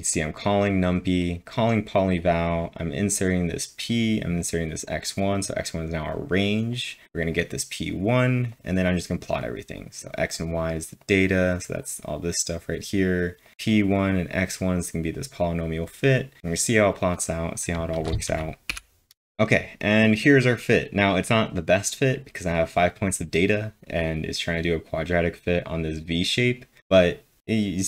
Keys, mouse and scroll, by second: 0.1 click, 0.6 click, 1.2 click, 2.2 double click, 3.1 click, 3.7 click, 4.4 click, 4.8-7.0 drag, 7.0-11.8 drag, 11.8 click, 12.2 click, 13.5-15.1 drag, 14.4-15.2 typing, 15.1-17.7 drag, 17.7 ctrl+Num_Lock, 17.7-20.0 drag, 17.9 ctrl+`, 18.4-19.1 typing.